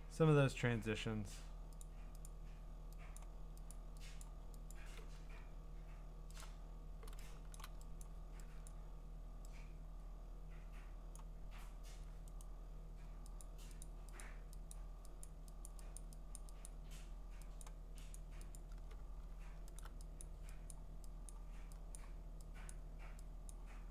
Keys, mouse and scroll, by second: 1.8 click, 2.2 click, 3.2 click, 3.7 click, 4.2 click, 4.7 click, 6.4 alt+click, 7.6 click, 8.0 click, 8.2 alt+click, 8.7 click, 11.1 click, 12.4 right click, 13.4 click, 13.8 click, 14.2 click, 14.7 click, 15.2 click, 15.6 click, 16.0 click, 16.4 click, 16.6 click, 17.6 click, 18.1 click, 18.6 click, 19.8 alt+click, 20.2 click, 20.7 click, 20.8 alt+click, 21.3 click, 21.6 alt+click, 22.0 click, 22.7 click, 23.5 click.